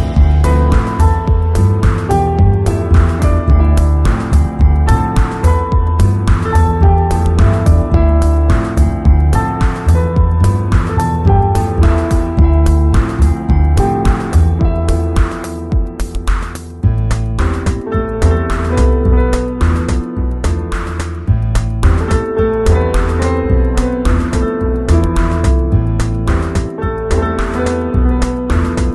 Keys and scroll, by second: 1.8 x, 3.9 z, 6.0 v, 6.5 super+Tab, 12.8 super+t, 13.6 alt+super+t, 23.7 super+l.